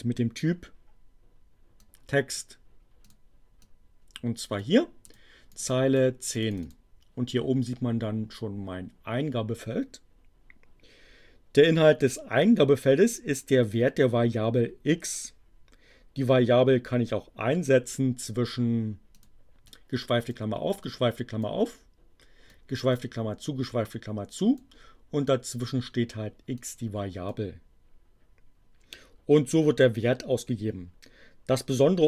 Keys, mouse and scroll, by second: 1.8 click, 3.0 click, 3.5-4.8 drag, 5.0 click, 5.5 click, 6.4 click, 19.1 click, 19.6 click, 20.8 click, 22.4 click, 23.7-24.8 drag, 26.5-27.5 drag.